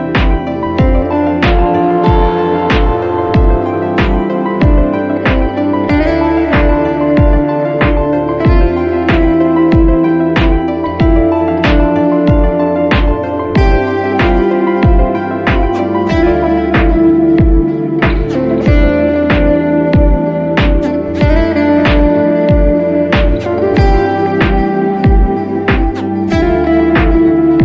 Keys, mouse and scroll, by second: 0.8 space, 1.0 click, 1.1 space, 2.8 space, 3.9 click, 7.9 click, 9.3 space, 9.8 click, 12.2 click, 13.1-14.0 typing, 14.0-16.0 drag, 16.0 ctrl+z, 16.5 click, 17.8 space, 18.3 click, 19.5 click, 22.0 click, 24.1 ctrl+z, 24.2 alt+Num_Lock, 24.5 alt+Num_Lock, 24.6 ctrl+d, 25.0 click, 25.2 [, 25.3 click, 25.7 scroll up 1, 25.8 click, 26.9 scroll down 1.